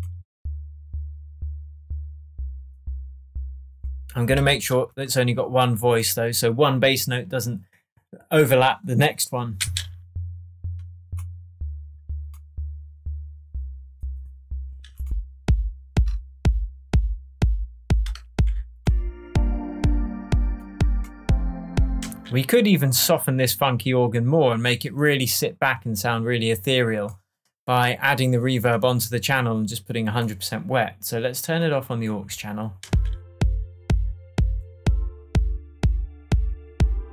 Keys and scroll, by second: 4.4 space, 9.6 space, 22.0 space, 32.8 space.